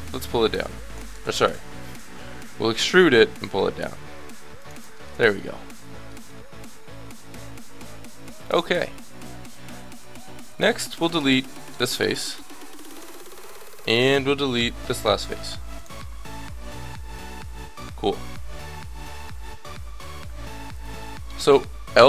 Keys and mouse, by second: 1.5 ctrl+z, 2.2 ctrl+z, 2.6 e, 8.3-9.9 middle drag, 11.6 x, 13.1 middle click, 15.4 x, 16.0-17.6 middle drag, 18.2-20.0 middle drag, 21.9 l.